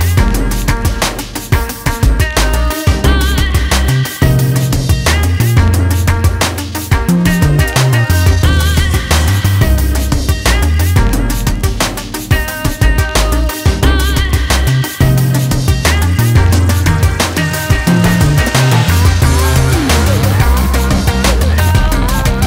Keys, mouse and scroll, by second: 0.0 Tab, 0.4 click, 4.9 click, 9.2 shift+a, 9.8 click, 11.8 s, 14.0 click, 18.0 click, 21.9 click.